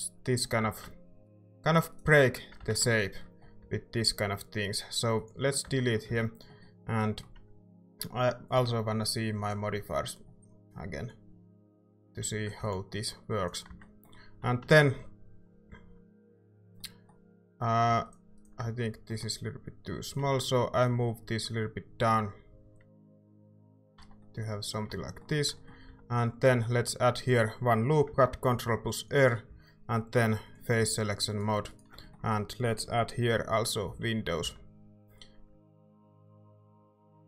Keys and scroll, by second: 0.6 z, 2.6 ctrl+z, 3.6 x, 5.6 Tab, 6.1 z, 7.3 typing, 12.2 a, 12.6 ctrl+s, 13.7 Tab, 14.4-15.6 typing, 23.9 Tab, 25.0 Tab, 25.8 a, 26.5 ctrl+r, 29.5 a, 33.9 i, 34.4 i.